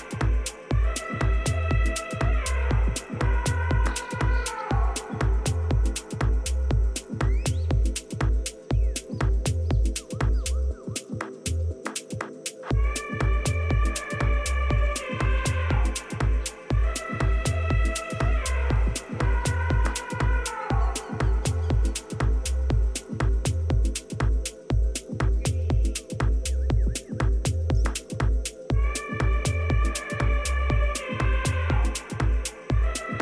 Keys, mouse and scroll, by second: 0.2-1.9 drag, 2.6 a, 3.2-6.8 middle drag, 5.6 a, 5.8 a, 6.8 b, 7.3-11.4 drag, 10.9 g, 16.3-19.2 middle drag, 16.8 a, 20.7-23.3 middle drag, 22.9 b, 23.9-25.7 drag, 25.9 a, 26.6 b, 27.7-29.6 drag, 29.5 a, 30.4 b, 32.2-33.2 middle drag.